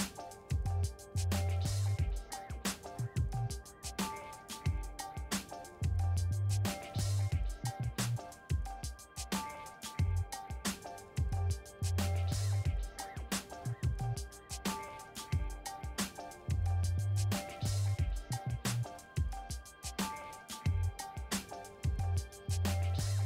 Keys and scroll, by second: 3.5-5.4 typing, 5.5 Return, 9.8-11.4 typing, 13.4 Return.